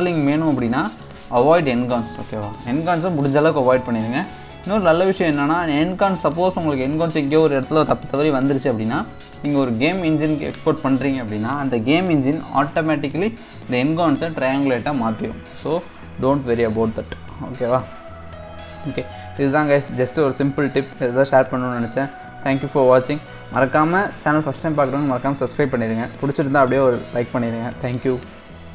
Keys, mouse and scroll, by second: 0.0-1.8 middle drag, 1.8 Tab, 2.3 scroll down 2, 2.5-5.1 middle drag, 5.1-7.8 scroll up 1, 7.8-8.2 scroll up 1, 11.2-11.6 scroll up 2, 11.6-12.0 scroll down 3, 12.0-15.1 middle drag, 15.5-15.8 scroll down 2, 15.8-17.5 middle drag, 17.5-18.5 scroll up 3.